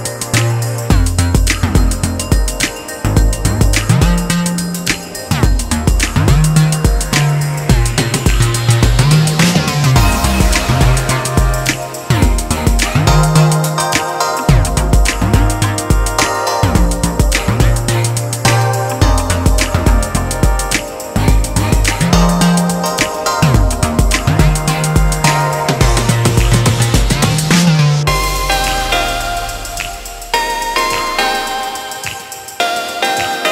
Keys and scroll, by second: 22.9-23.6 typing, 26.4 ctrl+t.